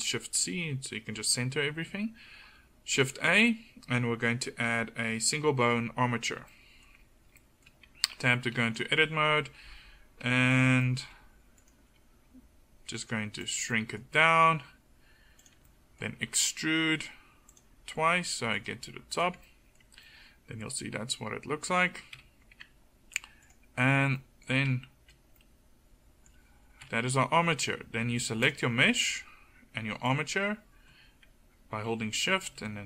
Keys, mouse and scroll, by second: 3.2 shift+a, 8.2 Tab, 9.0 g, 11.9 g, 13.5 click, 14.3 e, 16.2 e, 18.8 g, 22.2 KP_1, 22.6 Tab, 26.9 KP_1.